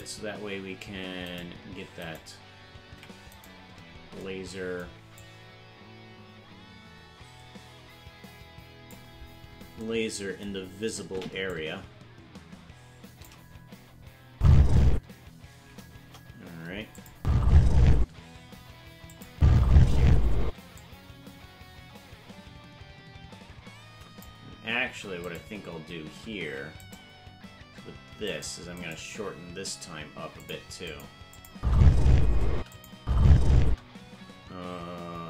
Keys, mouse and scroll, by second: 0.0 right click, 2.1 right click, 2.9 ctrl+Tab, 3.5 right click, 5.2-9.0 drag, 11.5-13.3 shift+drag, 14.3 space, 16.0 KP_0, 17.0-18.4 drag, 17.1 space, 18.0 space, 19.1-20.5 drag, 19.3 space, 20.5 space, 20.8-24.3 drag, 25.3 right click, 26.5 ctrl+Tab, 26.9 right click, 28.2 right click, 29.1 g, 30.9 click, 31.3 click, 31.5 space, 32.6 space, 32.7-33.7 drag, 32.9 space, 33.7 space, 34.4 g.